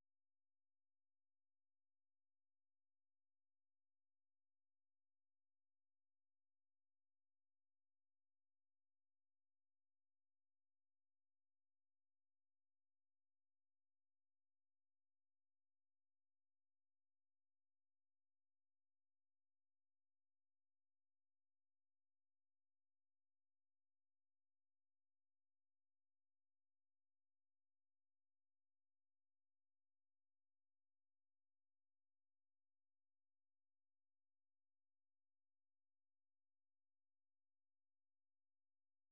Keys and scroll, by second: 1.4 Up, 1.6-4.8 typing, 8.8 alt+Tab, 9.3-10.3 typing, 12.4-13.6 typing, 14.3 Up, 16.1-17.6 typing, 18.0 Return, 20.0 alt+Tab, 21.2 alt+Tab, 21.4 Up, 21.9 s, 22.1 Return, 23.7 Up, 23.9 Up, 24.3 Up, 24.9 Return, 27.9-29.7 typing, 29.9 Return, 30.8-33.2 typing, 33.5 Tab, 33.9 Return, 36.2-36.9 typing, 38.5-39.1 typing.